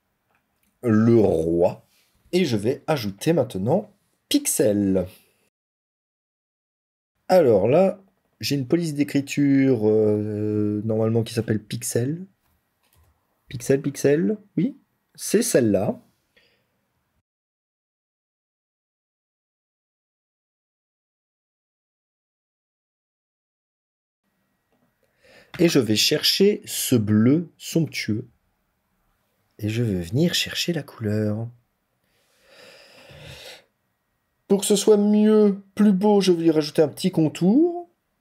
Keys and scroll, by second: 19.7 ctrl+z, 19.9 ctrl+t, 20.7 ctrl+z.